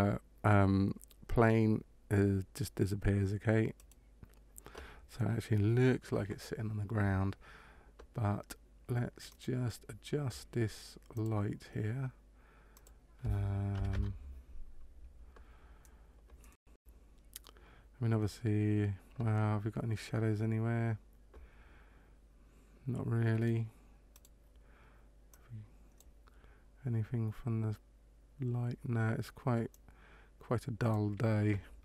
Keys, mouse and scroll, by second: 3.7 right click, 9.2 click, 11.1 click, 12.7 click, 24.1 right click, 25.2 click, 29.7 click.